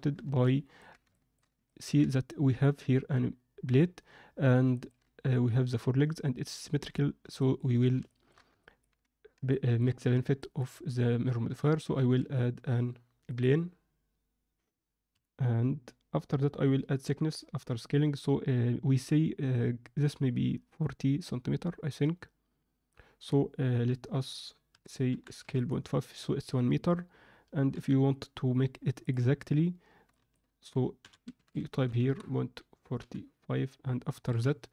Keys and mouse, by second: 0.4 ctrl+alt+middle click, 1.1 shift+middle click, 1.6 ctrl+alt+middle click, 4.7 ctrl+middle click, 7.3 ctrl+middle click, 8.0 alt+shift+middle click, 8.5 ctrl+middle click, 9.5 shift+middle drag, 10.3 ctrl+middle click, 12.0 shift+a, 24.7 s, 27.7 n, 28.9 click, 30.1-32.3 shift+drag, 32.9 n, 34.2 KP_Decimal.